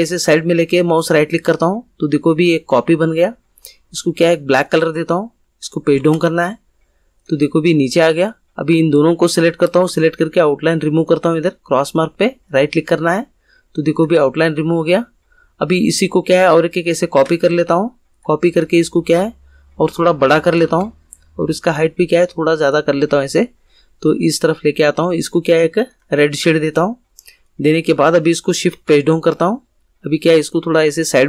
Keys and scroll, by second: 5.9 shift+Page_Down, 28.6 shift+Page_Down.